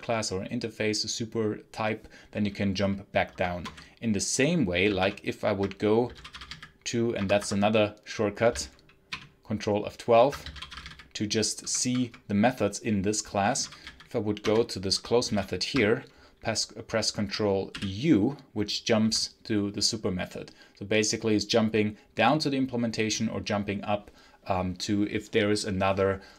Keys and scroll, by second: 3.2 Escape, 3.4 space, 3.5 h, 4.9 ctrl+F12, 5.7-6.8 typing, 7.0 Escape, 7.4 Escape, 9.0 ctrl+F12, 10.0-12.0 typing, 13.2-15.7 typing, 14.3 Return, 17.6 ctrl+u.